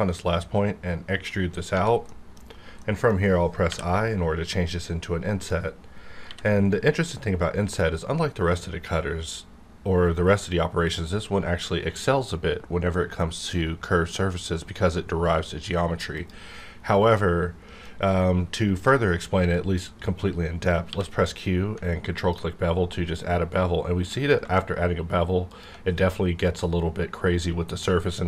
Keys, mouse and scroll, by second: 2.2 middle click, 2.4-2.8 scroll up 1, 2.8 middle click, 3.2 scroll up 1, 3.7 i, 4.5-6.2 middle drag, 6.2 b, 10.8 click, 16.1 click, 17.1-17.9 middle drag, 17.9-19.8 scroll up 2, 19.8 scroll up 1, 20.9 q, 22.1 ctrl+click.